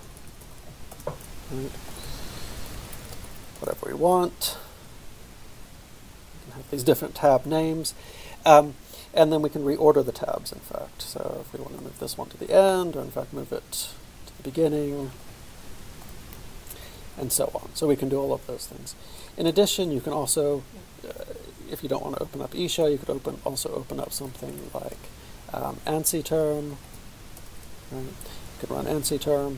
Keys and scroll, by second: 0.0-1.1 typing, 1.6 ctrl+}, 1.9 ctrl+|, 2.4-3.9 typing, 4.2 ctrl+{, 4.5 ctrl+}, 5.0-6.1 typing, 7.2 ctrl+{, 7.2 ctrl+}, 7.7 ctrl+{, 7.9 ctrl+{, 8.1 ctrl+}, 8.7 ctrl+}, 9.2 ctrl+}, 9.7 ctrl+{, 11.1 ctrl+alt+}, 11.8 ctrl+alt+}, 12.7 ctrl+alt+}, 14.1 ctrl+alt+{, 14.6 ctrl+alt+}, 14.7 ctrl+alt+}, 14.9 ctrl+alt+}, 15.1 ctrl+alt+}, 16.1 ctrl+alt+}, 16.7 ctrl+}, 17.0 ctrl+{, 17.2 ctrl+{, 17.4 ctrl+{, 19.7-21.0 typing, 22.8 Return, 24.3 typing, 25.8-27.5 typing.